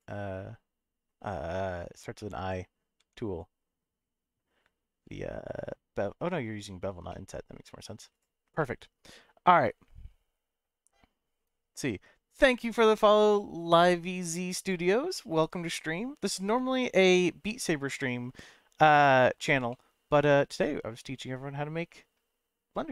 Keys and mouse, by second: 2.1 middle click, 3.0 Tab, 7.1 middle click, 8.2 click, 8.6 middle click, 19.7-22.1 middle drag.